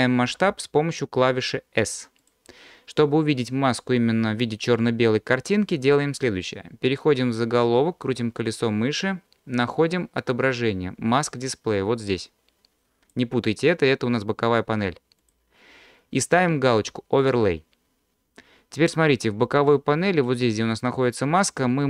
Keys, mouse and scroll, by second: 0.4 s, 2.2 click, 7.5-8.9 scroll down 8, 11.8-13.1 drag, 15.2-18.3 drag.